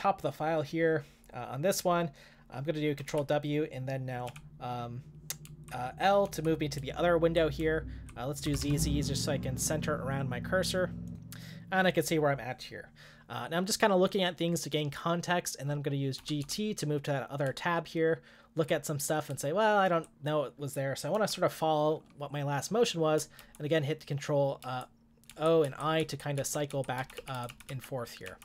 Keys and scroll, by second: 3.1 ctrl+w, 4.2 l, 5.4-8.6 typing, 16.0-18.2 typing, 20.9-21.6 typing, 23.4 ctrl+o, 24.6 ctrl+o, 25.3 ctrl+i, 25.6 ctrl+i, 26.0 ctrl+i, 27.0 ctrl+i, 27.2 ctrl+o, 27.5-28.4 ctrl+o.